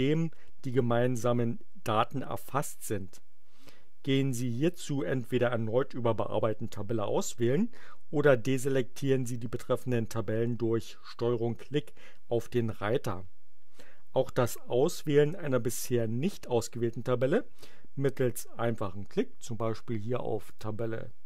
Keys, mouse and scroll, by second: 20.4 click.